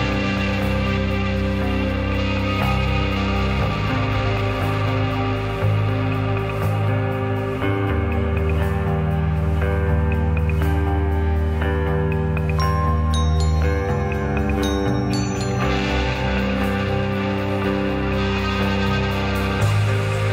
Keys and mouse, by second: 3.5 s, 4.9 g, 6.1 g, 8.2 shift+d, 11.8 click, 13.8-16.8 middle drag, 18.4-18.8 shift+middle drag.